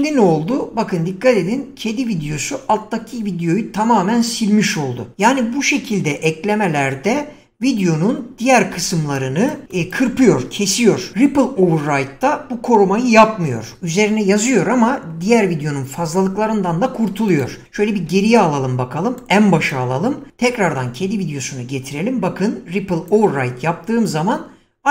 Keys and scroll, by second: 8.6 <, 17.9 ctrl+z.